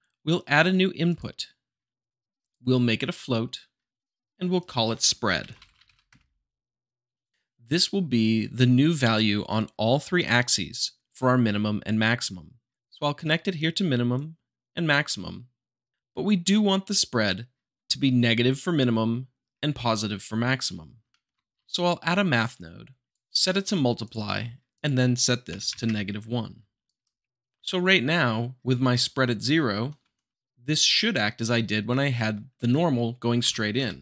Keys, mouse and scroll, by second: 1.1-2.1 drag, 2.4-3.4 drag, 4.5 click, 5.5-5.8 typing, 7.3 click, 12.7-13.3 drag, 14.1-15.2 drag, 20.6-21.5 middle drag, 21.5 shift+a, 23.1 click, 24.0-25.0 drag, 26.8 shift+right click, 29.5-30.6 middle drag, 30.6-31.7 drag, 33.4 Right.